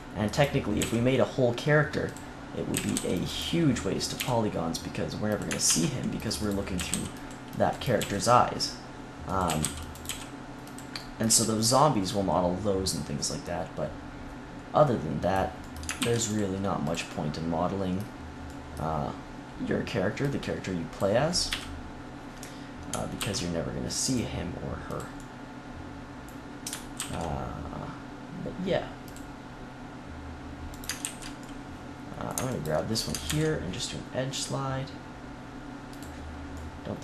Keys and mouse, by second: 0.7 g, 2.7 a, 2.9 c, 4.1 g, 5.6 ctrl+r, 6.7 a, 6.8 c, 7.9 g, 9.4 a, 9.5 c, 10.0 click, 10.0 g, 10.6-11.6 drag, 11.2 z, 15.9 ctrl+r, 16.9 click, 20.1-21.4 drag, 21.4 KP_3, 23.1 ctrl+r, 24.9 click, 26.9 ctrl+r, 30.7-33.2 right drag, 31.0 ctrl+z, 33.2 ctrl+e, 35.9-37.0 drag.